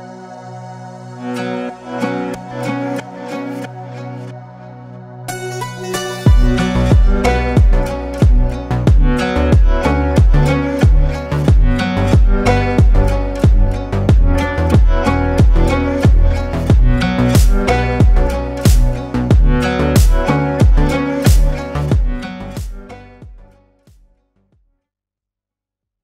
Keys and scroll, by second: 8.7 Tab.